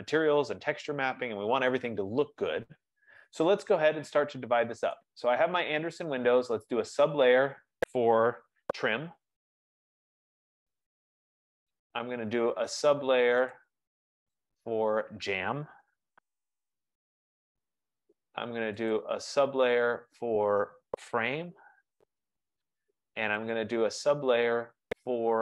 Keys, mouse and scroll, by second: 1.2-1.9 scroll, 5.0 click, 7.0 click, 9.2-10.1 typing, 11.1 typing, 13.1-13.9 typing, 13.6 click, 14.7 click, 15.5-17.6 typing, 17.0 Return, 18.6-19.7 typing, 19.0 click, 20.1 click, 21.1-22.9 typing, 23.7 click, 24.8 click.